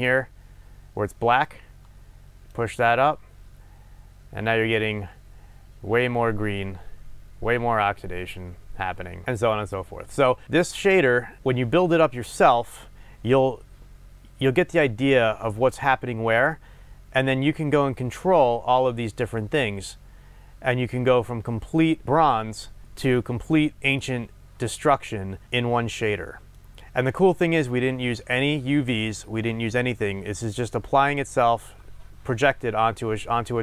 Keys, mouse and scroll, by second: 1.4 drag, 10.4 click, 12.7-15.4 scroll down 1, 22.8-33.6 middle drag, 25.4-25.9 scroll down 2.